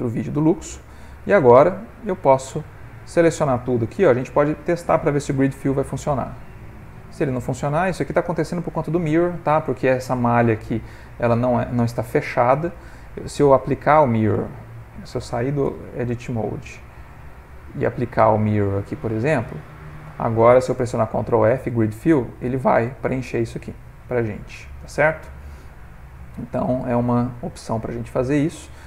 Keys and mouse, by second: 0.0 middle click, 0.8 click, 2.1 shift+click, 3.9 alt+click, 5.2 ctrl+f, 9.1 middle click, 11.1 ctrl+middle click, 13.7 click, 16.1 Tab, 17.2 click, 19.6 Tab, 19.9 ctrl+middle click, 20.9 ctrl+f, 23.2 middle click, 25.6 middle click, 26.9 middle click, 27.2-27.5 ctrl+middle click, 27.4 ctrl+middle click, 27.6 middle click, 28.1 middle click, 28.3 ctrl+middle click, 28.7 middle click.